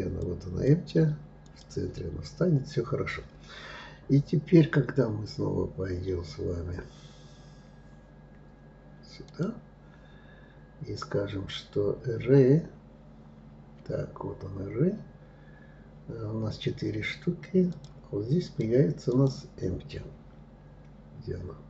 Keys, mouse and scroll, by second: 8.9 click, 17.4 click, 18.1 click, 18.8-21.6 drag.